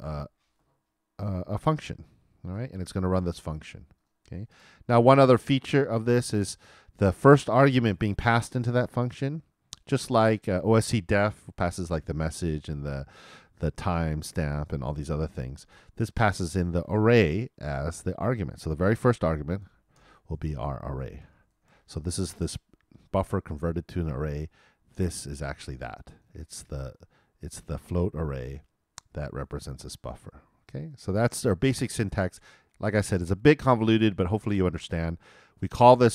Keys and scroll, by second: 0.1 shift+[, 0.2 shift+].